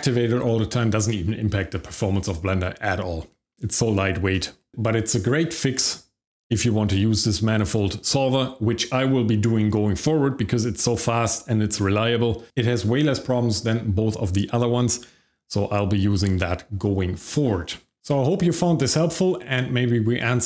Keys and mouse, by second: 11.8 middle drag.